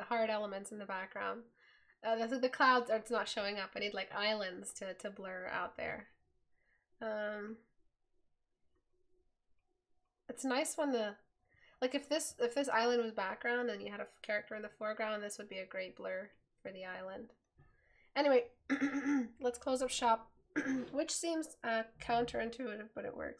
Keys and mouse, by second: 18.2 right click.